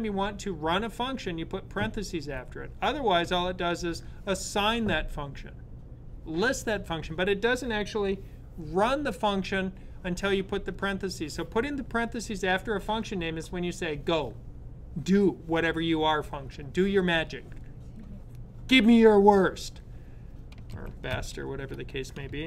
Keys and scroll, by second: 20.4 super+s.